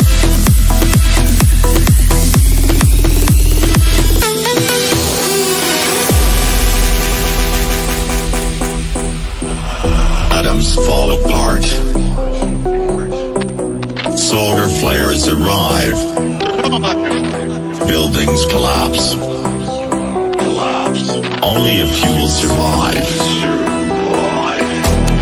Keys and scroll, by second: 4.5 KP_Add, 5.3 Down, 10.0 Down, 13.3 Delete, 17.2 F3, 24.5 ctrl+r.